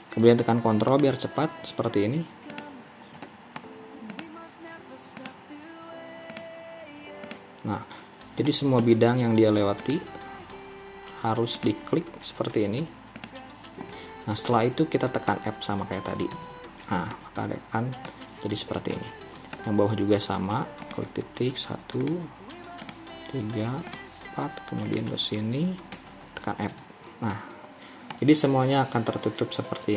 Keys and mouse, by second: 3.3 middle click, 8.5 middle click, 14.6 middle click, 16.4 f, 17.2-18.2 middle drag, 19.0 middle click, 26.8 f, 27.4 middle click, 28.8 KP_3.